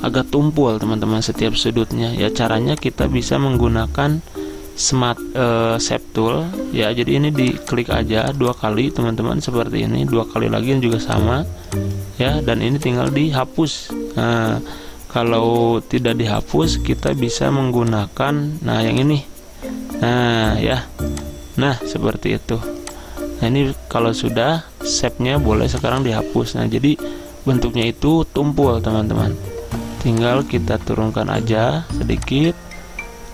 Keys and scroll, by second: 15.6 ctrl+z.